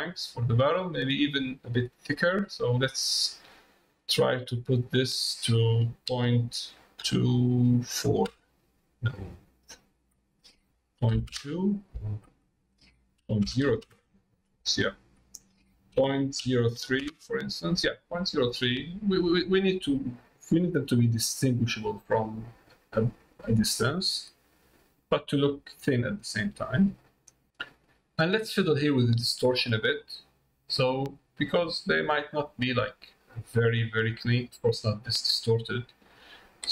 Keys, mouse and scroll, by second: 4.9-17.8 drag, 18.3 middle click, 19.0 middle click, 20.4 middle click, 21.4 middle click, 22.4 middle click, 23.6 middle click, 24.9 middle click, 25.8 middle click, 26.7 middle click, 29.4-36.7 drag.